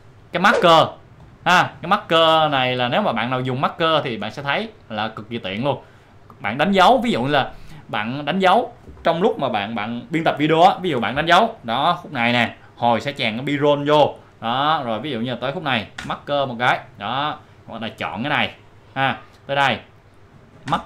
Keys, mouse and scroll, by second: 4.4-7.8 drag, 8.2 click, 14.7 click, 16.0 m, 16.9 click, 18.0 click, 20.7 m.